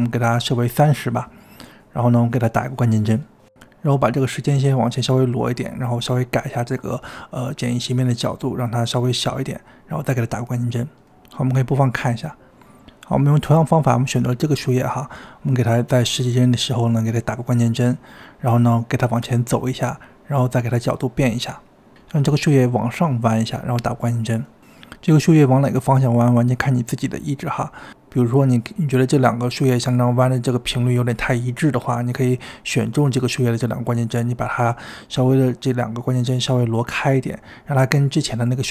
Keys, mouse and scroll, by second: 2.3-9.5 drag, 10.0-13.8 drag, 14.4-15.7 drag, 16.7-24.8 drag, 25.6 click, 26.6-27.4 drag, 27.4 space, 28.8 space, 29.9-37.9 drag, 37.9 space.